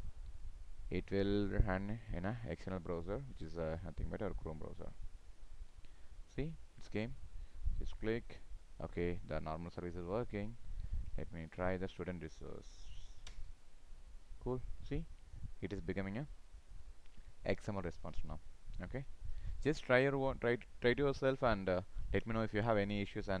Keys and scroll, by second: 11.5 ctrl+v.